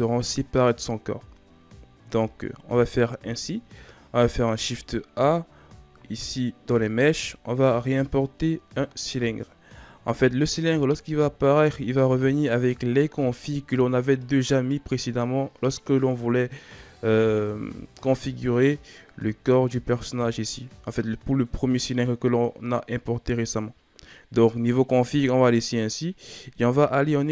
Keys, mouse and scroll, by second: 2.1 a, 4.1 shift+a, 26.5 Tab.